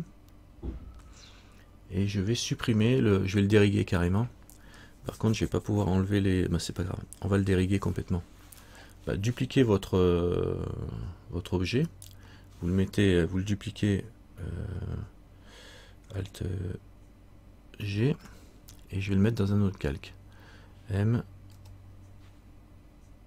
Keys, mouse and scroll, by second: 12.0 right click.